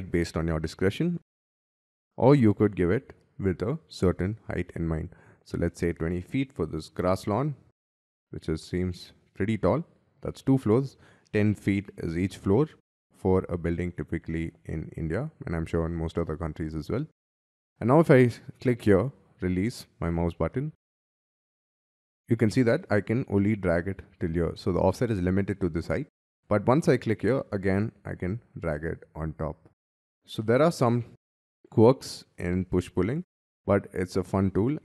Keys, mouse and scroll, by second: 0.1 middle click, 1.1-1.4 scroll up 4, 1.5 Escape, 1.7 Escape, 1.7 middle click, 1.9 scroll down 7, 5.6 2, 6.2 0, 6.7 ', 6.8 Return, 8.1 middle click, 9.8 scroll down 6, 17.2 scroll up 4, 17.3 middle click, 18.0-19.5 scroll up 5, 21.9 middle click, 29.4-30.3 scroll down 10, 30.3 middle click, 31.5-32.2 scroll up 8, 34.7-34.8 scroll down 5.